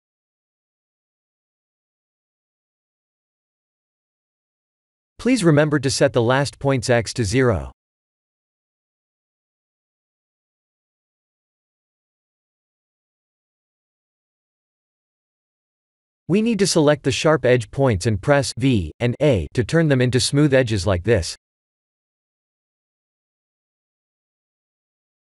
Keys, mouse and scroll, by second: 6.0 click, 8.1 click, 8.8-10.1 scroll down 3, 10.1 scroll down 2, 10.6 shift+middle click, 11.1-11.9 scroll up 4, 13.2 click, 16.1 shift+click, 16.7 v, 17.4 shift+middle click, 18.4 click, 18.6 v, 19.2 shift+middle click, 21.4 click, 21.8 g, 25.1 click.